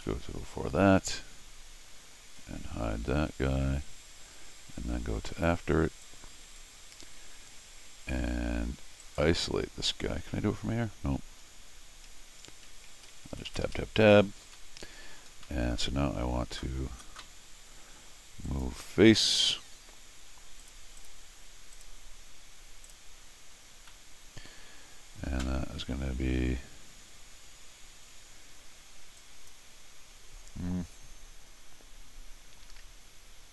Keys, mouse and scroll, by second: 2.3 Tab, 6.0 click, 9.0 right click, 11.4 middle click, 11.4 scroll up 2, 12.1 Escape, 12.7 Tab, 12.9 Tab, 13.1 Tab, 13.3 Tab, 13.5 Tab, 13.6 Tab, 13.8 Tab, 14.5 middle click, 15.3-15.7 scroll down 4, 16.0 scroll up 2, 18.5 click, 20.6 click, 21.0 click, 21.7 click, 22.8 click, 24.2 middle click, 29.2 click.